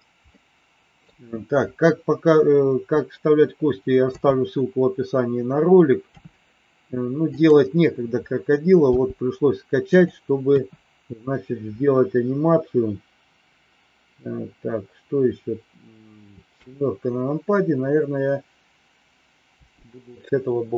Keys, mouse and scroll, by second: 0.2 middle click, 3.9 KP_7, 6.1 r, 8.9 g, 10.5 KP_1, 16.5 KP_7, 19.6 g.